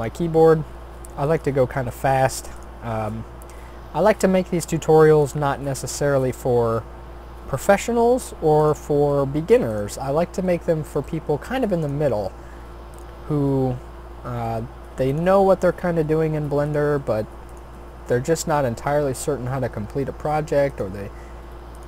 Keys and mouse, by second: 0.4 r, 1.7 e, 2.8 s, 5.9 e, 9.1 r, 10.0 s, 11.0 g, 12.0 e, 13.4 r, 16.0 s, 17.0 g, 17.8 e, 19.6 s, 21.1 e.